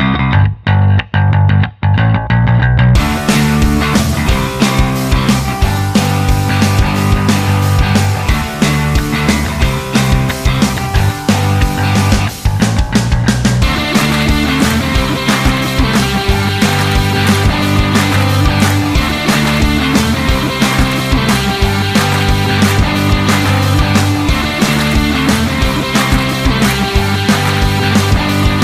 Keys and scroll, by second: 0.0 s, 10.5 p, 12.2 p, 22.3-24.4 typing, 24.0 Left.